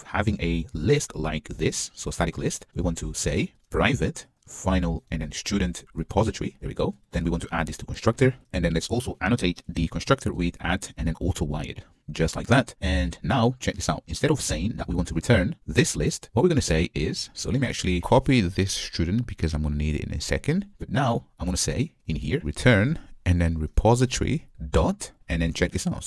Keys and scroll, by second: 4.0 Return, 7.1 alt+Return, 11.0 Return, 19.5 super+x, 23.0 Return.